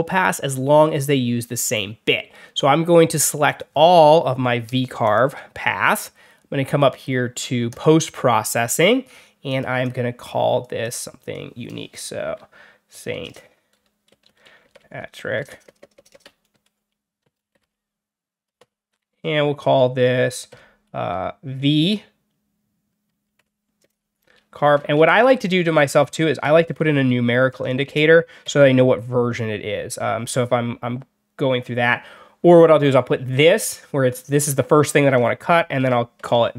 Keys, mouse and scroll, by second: 3.4 click, 4.9 shift+click, 7.6 click, 9.4 click, 9.7 click, 10.7 click, 11.8-19.0 typing, 20.4 shift+-, 21.5 shift+v, 23.3-28.7 typing, 35.4 shift+-, 35.7 shift+v, 36.2 1.